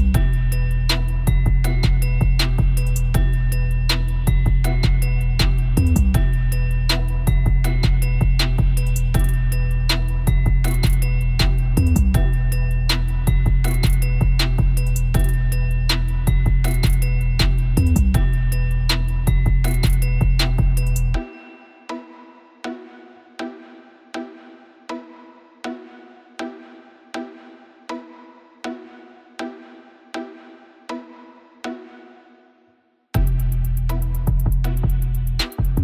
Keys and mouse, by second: 0.6-1.1 drag, 1.1 w, 1.5 w, 3.7-4.9 middle drag, 6.2-7.2 drag, 7.2 middle click, 8.1 middle click, 10.2-13.4 drag, 13.4 right click, 13.8 middle click, 17.0 ctrl+z, 18.0 w, 19.3 click, 20.1 ctrl+z, 20.5 ctrl+z, 23.2 click, 24.3 w, 25.0 click, 26.5 click, 27.3 w, 28.3 w, 30.4 click, 30.8 a, 31.0 a, 32.2 w, 33.5 g, 34.7 drag, 35.4 g.